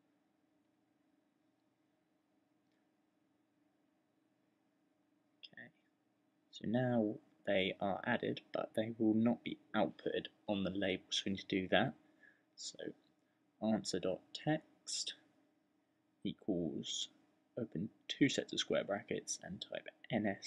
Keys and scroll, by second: 0.3-2.3 typing, 3.5-4.2 typing, 11.0-12.0 typing, 13.1-14.7 typing, 16.0 typing, 17.6-20.4 typing.